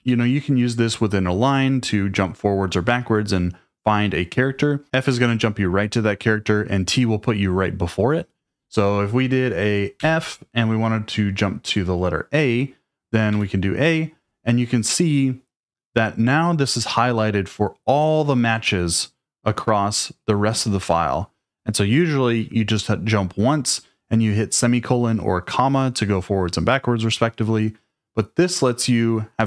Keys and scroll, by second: 0.0 j, 10.0 f, 13.3 a.